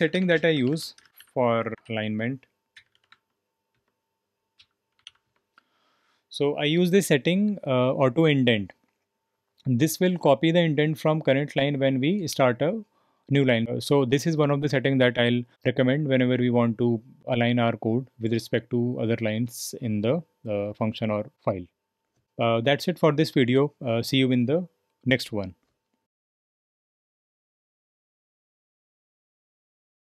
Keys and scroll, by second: 0.0-5.5 typing, 3.7 Return, 22.2 typing.